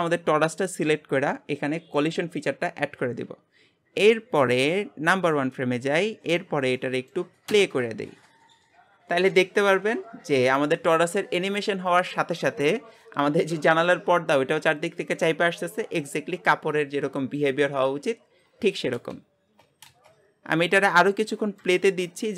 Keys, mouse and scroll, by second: 0.1 click, 2.1-6.8 drag, 6.8 middle click, 7.5 space, 19.3 space, 19.8 space, 20.9-22.0 middle drag, 22.0-22.3 scroll up 2.